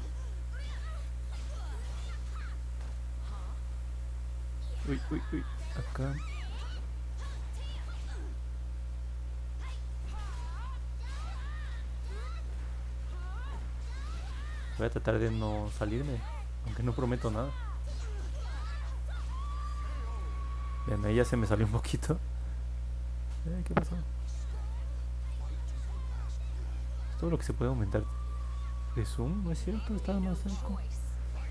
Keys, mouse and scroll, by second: 6.3-17.1 drag, 18.6 middle click, 19.2 alt+click, 20.3 middle click, 20.9 middle click, 21.7 alt+click, 22.7 middle click, 23.4 click, 23.9 middle click, 25.2 click, 25.6 middle click, 26.0-26.7 scroll down 3, 26.2 middle click, 26.3 middle click, 26.7 middle click, 27.3 middle click, 28.1 alt+click, 29.6 middle click, 30.0 middle click, 30.4 middle click.